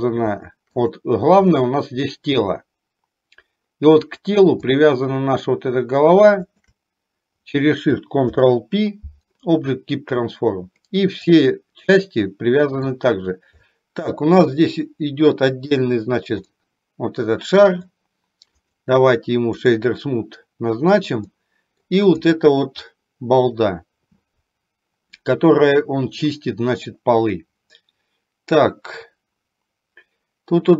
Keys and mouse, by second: 1.6-4.1 middle drag, 4.8 click, 6.4 shift+click, 8.4 ctrl+p, 11.3 drag, 12.1-12.8 middle drag, 13.7-14.4 shift+middle drag, 15.7 click, 16.6-17.9 middle drag, 18.7-19.8 right drag, 21.4-21.8 middle drag, 27.4-30.7 middle drag.